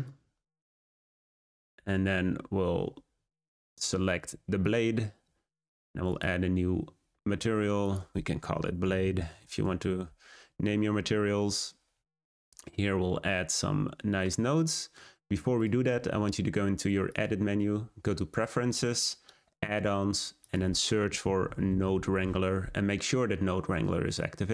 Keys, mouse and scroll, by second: 0.7-3.7 scroll up 4, 4.7 click, 6.1-10.8 drag, 15.5-21.4 drag.